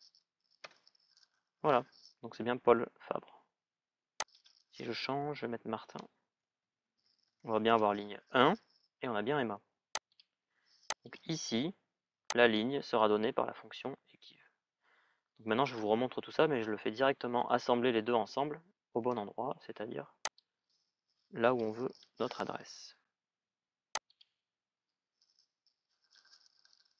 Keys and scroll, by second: 0.4 Return, 5.2 Return, 5.4-7.2 typing, 7.4 Return, 18.9 Escape, 21.6 Delete.